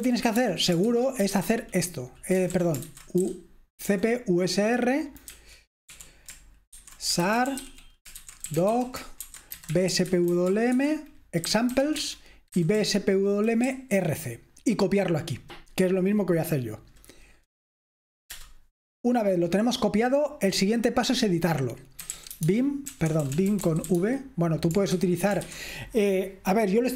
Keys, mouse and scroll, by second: 0.0-1.3 typing, 2.4-3.9 typing, 5.5-13.0 typing, 13.7 Right, 18.4 Return, 21.8-25.5 typing.